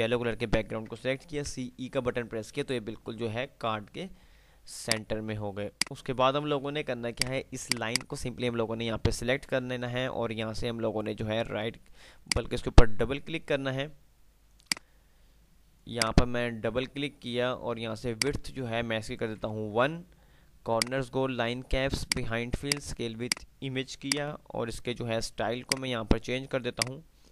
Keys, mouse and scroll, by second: 1.4-1.7 typing, 5.1 click, 5.4 F2, 7.4 click, 12.6 click, 15.1-20.9 drag, 18.7-19.1 click.